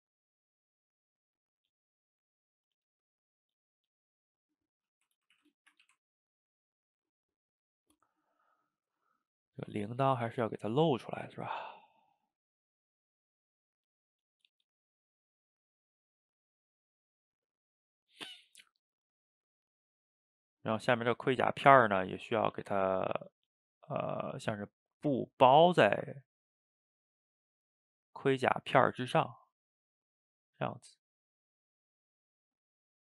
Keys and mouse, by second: 0.3-1.5 drag, 1.5 middle click, 2.1 click, 2.4 middle click, 3.1 click, 3.6 middle click, 4.0-5.2 drag, 5.2 ctrl+z, 5.4 ctrl+z, 5.6 shift+middle click, 5.8 f, 6.2 middle click, 6.6-7.8 drag, 7.8 middle click, 8.4 click, 9.3-10.7 middle drag, 10.7 click, 11.0 middle click, 11.4 f, 11.9 middle click, 12.6-13.6 drag, 13.6 middle click, 14.3-15.3 drag, 15.3 middle click, 15.9 click, 16.5 middle click, 16.8-18.0 drag, 18.0 middle click, 18.7-20.7 drag, 20.7 middle click, 21.4 click, 22.1 middle click, 22.8 ctrl+z, 23.0-26.4 drag, 26.4-28.7 middle drag, 28.7-30.0 drag, 30.0 middle click, 30.8 click, 30.9 middle click, 31.5-33.1 drag.